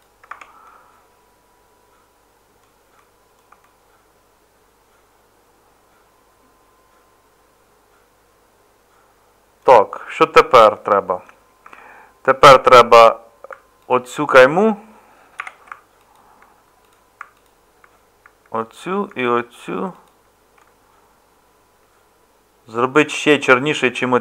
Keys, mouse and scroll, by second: 0.3 Tab, 11.6 Tab.